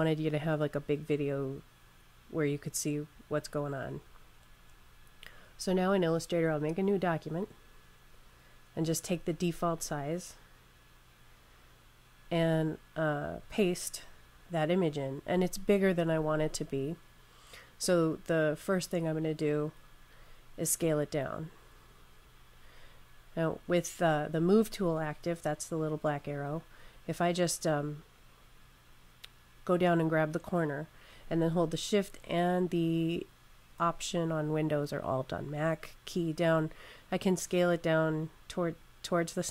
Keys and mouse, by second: 6.2 click, 12.2 click, 13.3 super+v, 31.1 click.